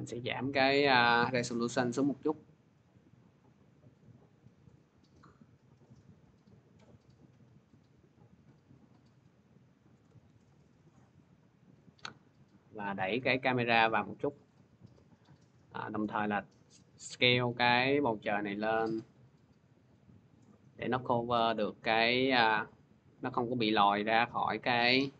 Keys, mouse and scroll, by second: 9.6 shift+click, 10.3 ctrl+z, 15.5 click, 16.4 b, 20.3 click, 20.3 s, 20.8 click, 21.5-25.1 drag.